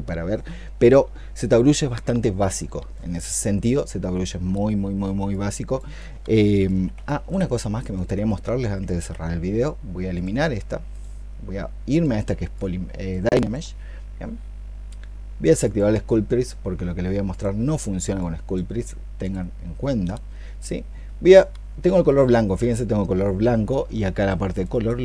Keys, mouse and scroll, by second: 6.9 shift+click, 13.2 alt+click.